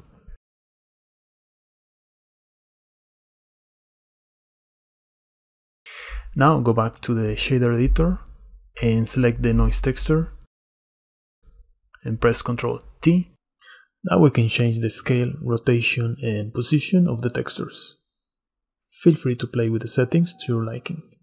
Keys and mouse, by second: 2.0-3.0 drag, 4.3 click, 8.2 middle click, 10.5 middle click, 11.5-11.8 drag, 13.0 ctrl+i, 13.6 click, 14.3 click, 15.8-17.9 shift+middle drag, 18.4 shift+middle click, 20.4 middle click.